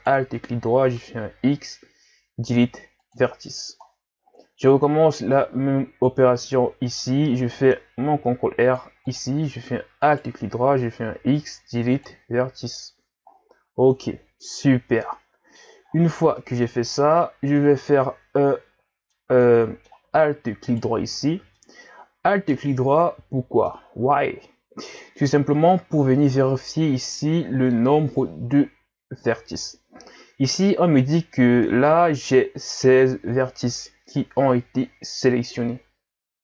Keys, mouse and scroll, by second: 1.2 x, 3.9 scroll down 4, 4.2-5.3 scroll up 10, 5.7-6.6 scroll up 1, 8.1 ctrl+r, 10.1 alt+right click, 11.2 x, 13.3 scroll down 2, 13.9-14.5 scroll down 2, 14.5 z, 15.0 middle click, 15.9-16.4 scroll up 3, 16.4 middle click, 17.0-17.3 scroll down 5, 17.6-20.7 middle drag, 20.7 alt+right click, 21.6-24.6 middle drag.